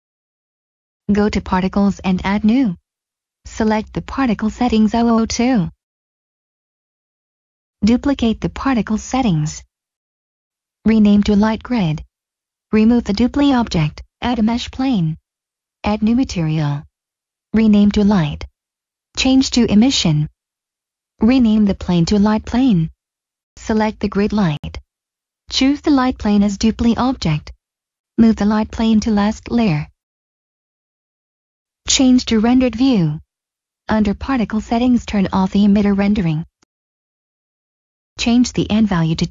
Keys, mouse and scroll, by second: 1.8 click, 4.3 click, 7.6 click, 8.3 click, 11.4 click, 12.1 scroll down 1, 13.7 click, 14.6 middle click, 15.0 click, 15.7 middle click, 16.6 h, 17.0 Return, 18.8 click, 21.3-22.3 typing, 23.1 click, 27.2 click, 28.6 m, 30.3 click, 31.5 middle click, 31.8 click, 31.9 middle click, 32.7 click, 33.9 click, 35.5 click, 36.5-37.3 scroll up 1, 37.5 middle click, 38.6 click, 38.8 typing, 39.2 Return.